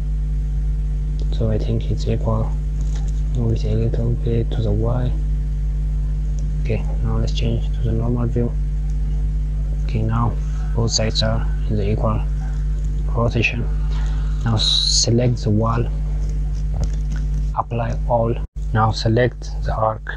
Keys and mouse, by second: 9.1 click, 9.9 click, 14.3 click, 16.0 click, 18.0 click, 19.0 click.